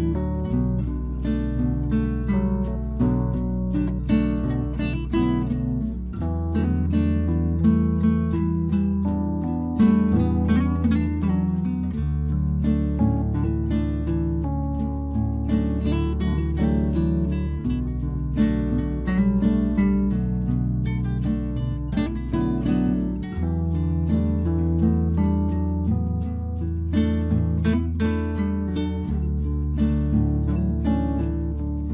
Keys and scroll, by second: 23.8 Return, 30.0 Return.